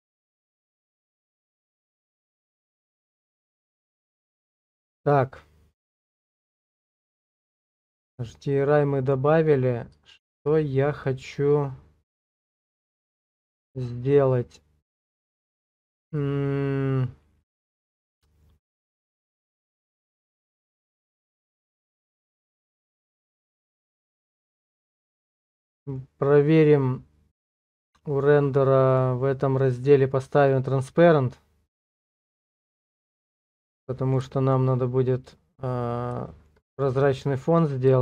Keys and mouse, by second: 4.6 click, 5.8 click, 6.1 Tab, 7.0 shift+click, 7.4-9.1 drag, 10.1 shift+middle click, 11.0-17.7 middle drag, 18.3 shift+middle click, 18.7 middle click, 20.8 click, 25.2 shift+click, 25.3 shift+middle click, 25.7 middle click, 26.3 middle click, 33.8 middle click, 34.3 shift+middle click, 36.3 shift+middle click, 36.7 middle click.